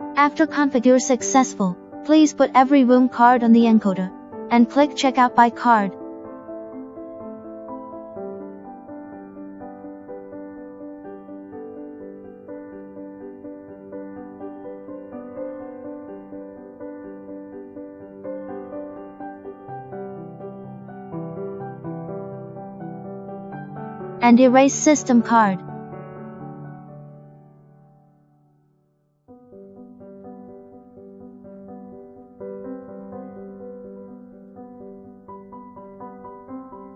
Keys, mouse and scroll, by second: 7.1 click, 10.0 click, 11.0 click, 12.7 click, 20.4 click, 21.2 click, 22.8 click, 24.2 click, 29.4 click, 30.9 click, 32.6 click, 33.8 click, 35.8 click, 36.7 click.